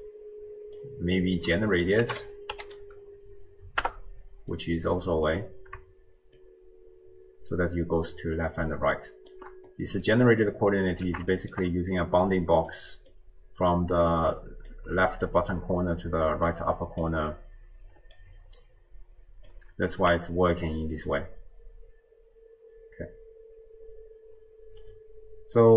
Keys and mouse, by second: 0.0 click, 0.2-1.1 drag, 1.5-1.9 drag, 4.1 click, 4.9 middle click, 6.4-9.4 shift+drag, 10.1-11.2 middle drag, 11.4 shift+middle drag, 12.2 middle click, 12.7 click, 14.2 click, 16.2 d, 16.5 click, 18.2-20.1 drag, 20.5-25.7 shift+drag.